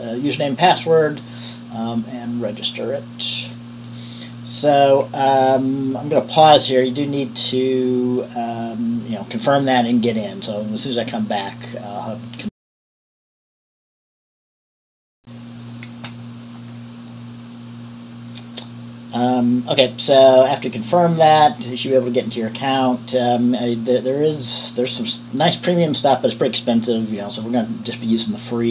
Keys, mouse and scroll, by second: 13.7 click, 15.2 Up, 15.2 Return, 21.3-22.6 drag, 28.0 click.